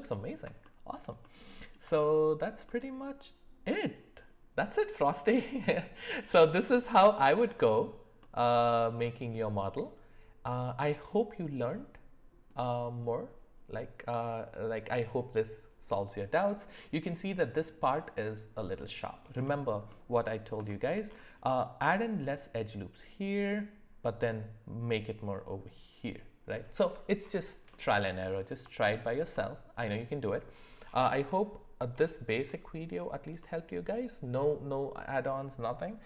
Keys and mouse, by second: 0.6-1.0 shift+middle drag, 1.2-1.7 middle drag, 2.0 shift+middle click, 2.7-3.9 middle drag, 19.9-20.2 middle drag, 20.7 shift+middle drag, 27.7 middle click, 28.8 shift+middle click, 29.3 middle click.